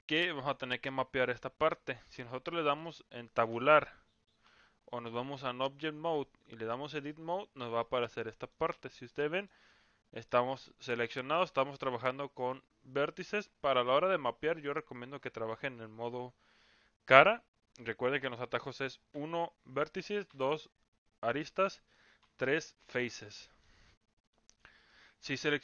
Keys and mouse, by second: 3.5 Tab, 4.4 Tab, 5.3-6.8 drag, 7.8 middle click, 9.0 middle click, 10.3 middle click, 19.1 1, 20.2 2, 22.3 3, 23.2 middle click, 24.2 click, 24.8 middle click.